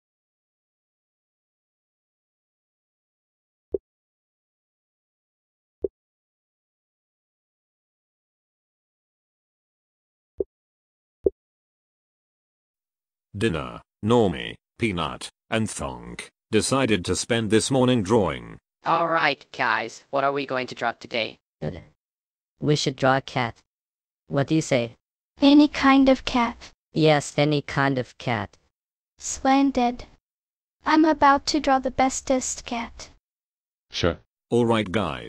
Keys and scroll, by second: 0.0-1.0 typing, 7.7 Escape, 8.3 Escape.